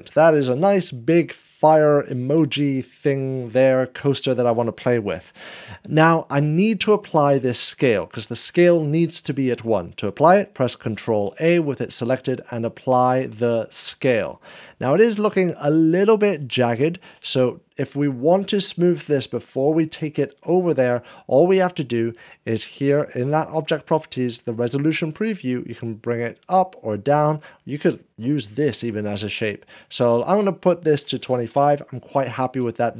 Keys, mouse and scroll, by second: 0.1 ctrl+v, 1.6 Return, 1.8 g, 2.3 shift+z, 4.9 middle click, 11.2 ctrl+a, 11.2 g, 11.2 shift+z, 13.8 g, 13.8 shift+z, 14.7 scroll up 1, 16.6 ctrl+a, 16.6 shift+middle click, 17.9-19.4 drag, 25.5 click, 26.3-29.6 drag, 31.0 2, 31.2 5, 31.5 Return.